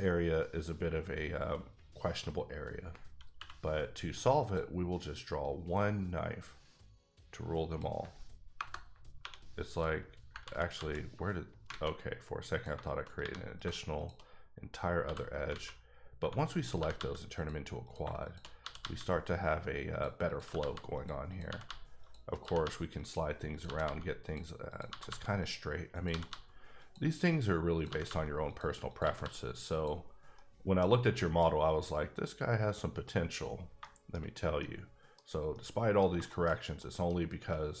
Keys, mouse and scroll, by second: 3.3 middle click, 4.4 click, 7.7 click, 8.5 KP_Enter, 9.2 3, 9.7 click, 10.4 ctrl+z, 10.8 ctrl+z, 11.7 alt+a, 12.5 click, 12.7 shift+click, 13.2 3, 13.6 click, 15.0 f, 15.5 alt+a, 16.6 click, 16.8 g, 16.9 g, 17.3 click, 17.8 click, 18.2 shift+click, 18.6 g, 18.8 g, 19.9 click, 20.3 click, 20.4-22.6 typing, 20.9 click, 21.3 click, 22.0 click, 22.3 double click, 22.9 click, 23.5 click, 23.6 g, 23.8 g, 24.2 click, 24.7 click, 24.9 g, 25.0 g, 25.4 click, 25.9 click, 26.1 g, 26.3 g, 26.8 click, 27.8 click, 27.8 g, 28.0 g, 28.4 click, 28.9 click, 29.0 g, 29.2 g, 29.7 click, 30.0 scroll down 3, 30.3 middle click, 31.2 middle click, 31.4-33.1 scroll up 3, 33.1-33.7 scroll, 33.7-34.2 shift+scroll down 4, 33.8 shift+middle click, 34.6 middle click, 35.2-35.5 scroll down 1, 35.5 middle click, 36.0-36.8 scroll down 4, 36.2 shift+middle click, 36.8 middle click, 37.1-37.8 scroll up 3.